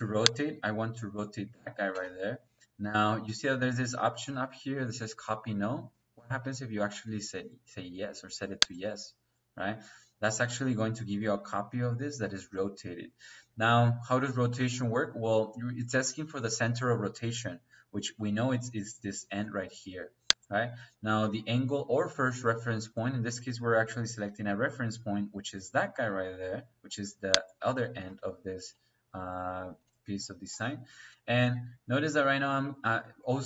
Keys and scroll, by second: 1.8 space.